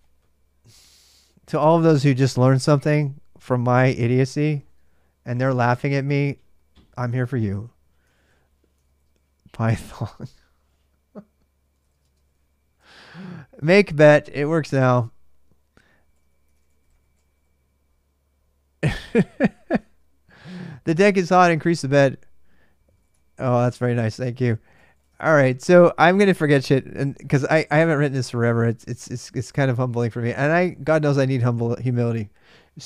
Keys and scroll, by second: 7.7-9.7 typing, 11.3-12.6 typing, 14.6-17.5 typing, 19.5 Return, 22.4-25.1 typing, 26.7 ctrl+a, 26.8 ctrl+a, 31.8-32.6 typing.